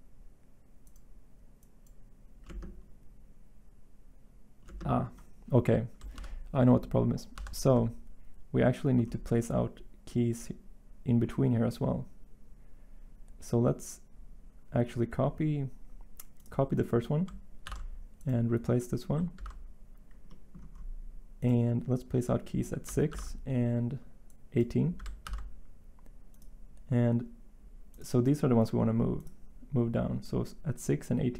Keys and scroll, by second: 6.1 ctrl+z, 7.3 ctrl+z, 17.6 ctrl+c, 19.3 ctrl+v, 23.1 ctrl+v, 25.2 ctrl+v.